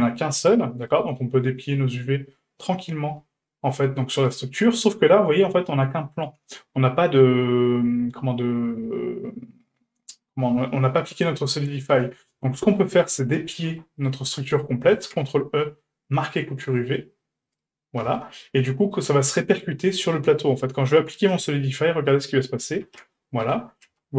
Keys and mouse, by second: 0.5 a, 2.1 shift+middle click, 4.1 shift+right click, 12.6 a, 13.6 a, 14.9 ctrl+e, 18.1 Tab, 21.2 click, 22.1 click, 22.8 ctrl+a, 23.4 Tab, 23.9 a.